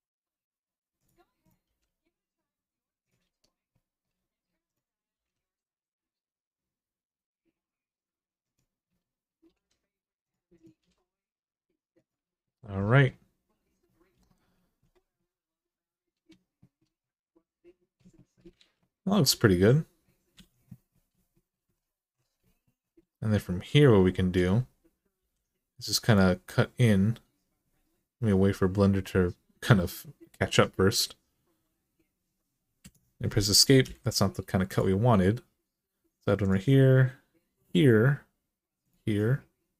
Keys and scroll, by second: 1.4 g, 4.9 g, 9.3 g, 10.6 g, 18.3 alt+z, 20.1 alt+z, 25.0 k, 32.6 Escape, 33.6 k.